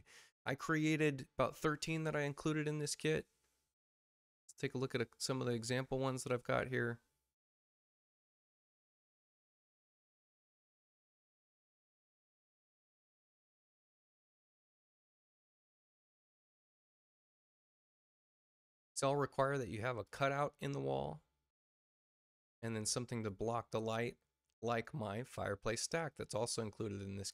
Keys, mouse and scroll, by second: 3.7 click, 4.4 click, 5.8 middle click, 5.8 scroll down 2, 6.4 click, 7.3 click, 8.2 click, 9.5 click, 10.8 space, 12.0 space, 12.5 click, 13.0 x, 14.3 click, 15.4 click, 17.7 click, 20.0 click, 21.0 space, 21.4 click, 22.2-23.2 drag.